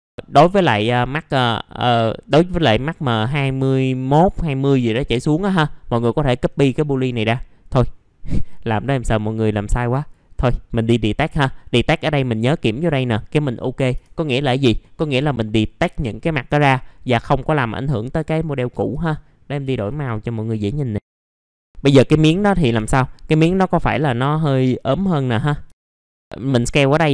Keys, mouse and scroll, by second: 9.9-18.8 drag, 19.7 click, 22.8 r, 23.7-25.6 drag, 25.7 alt+middle click, 26.1 alt+middle click, 27.0 click.